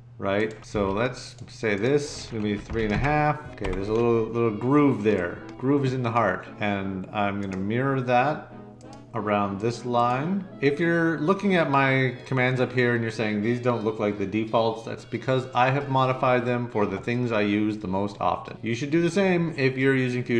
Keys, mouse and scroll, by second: 0.7 d, 2.5 3, 2.8 5, 3.6 Escape.